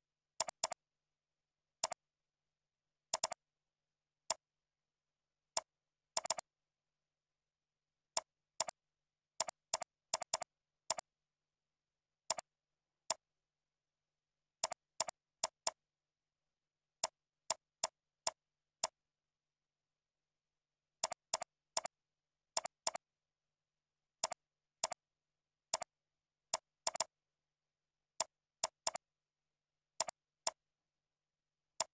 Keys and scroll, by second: 2.2 ctrl+c, 3.9 ctrl+v, 5.2 ctrl+b, 10.0 ctrl+c, 10.4 ctrl+a, 10.6 ctrl+v, 19.6 ctrl+Up, 19.9 ctrl+Left, 20.1 ctrl+Down, 27.5 ctrl+b.